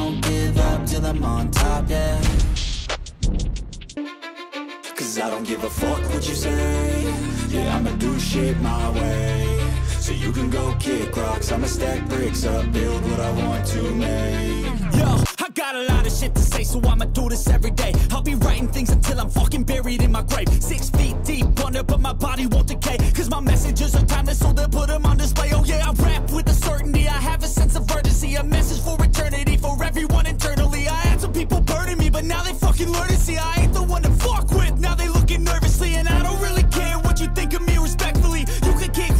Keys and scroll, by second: 1.0 ctrl+z, 1.6 space, 5.1 space, 5.3 ctrl+z, 7.7 ctrl+=, 8.3 space, 8.6 ], 8.8 ], 9.2 ctrl+-, 10.1 ctrl+z, 10.3 ctrl+-, 11.8 ctrl+z, 14.4 space, 16.7 ctrl+=, 17.5 ctrl+-, 17.6 ], 18.0 ctrl+z, 18.3 space, 18.8 ctrl+z, 19.7 space, 19.8 ], 20.6 ctrl+z, 21.7 space, 23.0 ctrl+z, 23.9 ctrl+z, 25.5 ctrl+z, 25.8 ctrl+z, 26.1 ctrl+z, 26.3 ctrl+z, 27.9 ctrl+=, 28.2 space, 32.2 space, 36.9 ctrl+=.